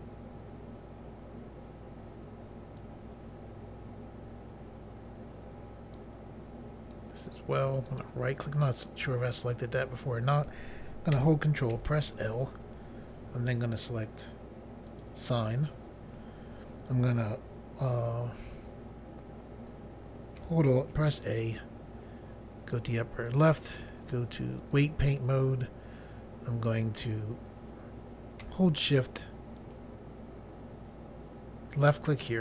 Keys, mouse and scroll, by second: 5.9 click, 7.8 right click, 11.7 ctrl+l, 14.8 click, 20.9 alt+a, 23.2 click, 24.6 click, 29.6 shift+click.